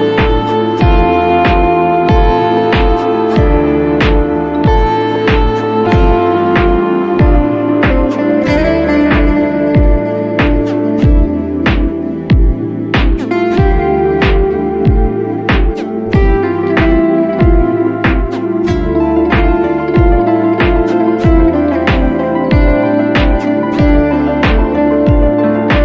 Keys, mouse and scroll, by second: 0.6 space, 0.9 click, 1.0 space, 1.7 space, 1.9 click, 3.1 right click, 4.4 click, 5.6 right click, 6.8 click, 7.8 ], 7.9 ], 8.2 click, 10.6 click, 11.0 click, 12.5 space, 13.3 click, 15.2 click, 15.8 click, 17.2 right click, 17.5 click, 18.3 click, 18.9 click, 19.5 click, 20.0 space, 20.2 space, 20.7 space, 20.8 right click, 21.0 click, 21.7 click, 24.5 right click.